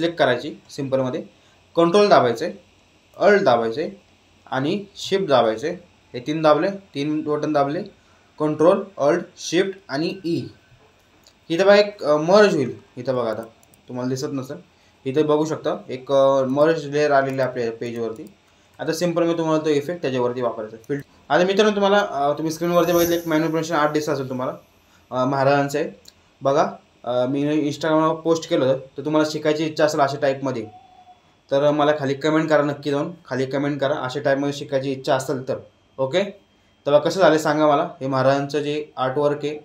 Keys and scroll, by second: 9.9 ctrl+alt+shift+e.